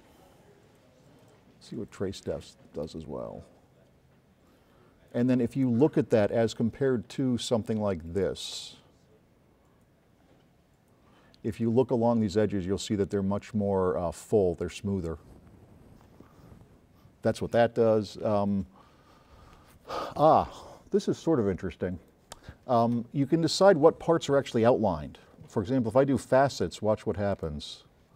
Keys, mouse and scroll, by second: 2.3-2.8 drag, 8.3-9.4 drag.